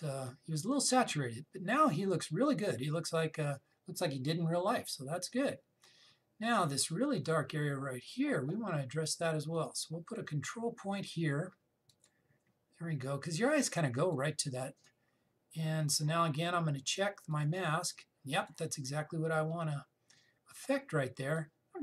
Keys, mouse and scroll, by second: 8.5-10.2 scroll up 1, 10.2 click, 16.4-18.0 scroll down 1, 18.0 click, 20.0-21.8 scroll down 1.